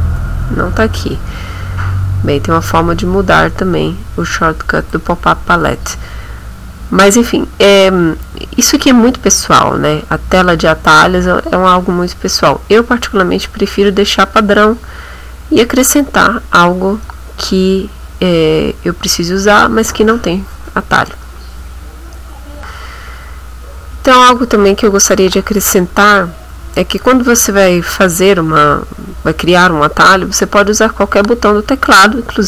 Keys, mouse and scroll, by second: 0.0-0.2 typing, 2.5-3.2 scroll up 3, 4.3 click, 6.6-7.0 scroll down 2, 10.4 click, 16.6 scroll down 2, 22.6 click, 28.2 click.